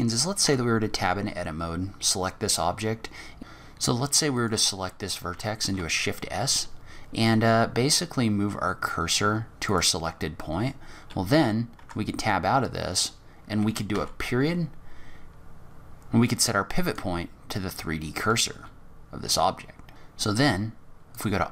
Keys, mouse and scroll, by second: 0.7 Tab, 4.8 click, 6.1 shift+s, 12.2 Tab, 18.3-18.6 scroll up 3, 18.9 g, 21.1 click.